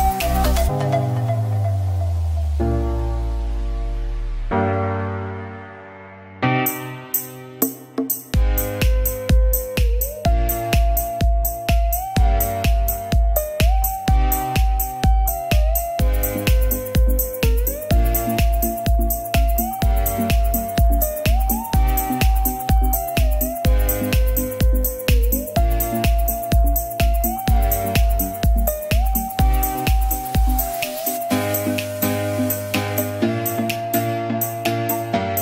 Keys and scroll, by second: 0.8 space, 1.1 ctrl+z, 1.5 ctrl+z, 2.2 space, 5.0 space, 5.3 ctrl+s, 8.5 space, 9.7 space, 10.6 [, 11.0 x, 12.2 space, 12.5 space, 12.9 space, 14.5 space, 15.0 space, 15.5 space, 16.0 space, 20.3 space, 21.5 ], 29.9 ctrl+t, 31.9 ctrl+s.